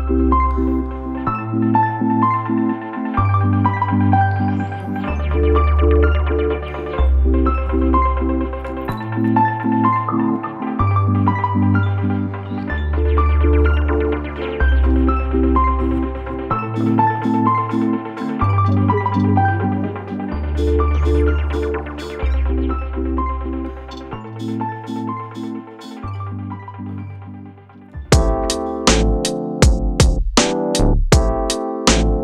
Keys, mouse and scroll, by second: 1.6-4.7 drag, 5.0 shift+middle click, 5.5 scroll up 2, 7.7-9.1 drag, 9.6 scroll down 1, 9.7 shift+middle click, 10.2-11.2 drag, 11.7 scroll down 3, 11.9 shift+middle click, 12.3-13.3 drag, 15.4 shift+middle click, 15.6-16.2 scroll up 1, 16.2-17.2 drag, 17.5 shift+middle click, 17.8 click, 18.7 scroll down 2, 18.8 shift+middle click, 19.1-20.1 drag, 20.3-22.7 drag, 23.8 click, 24.0-26.6 drag, 26.6 e.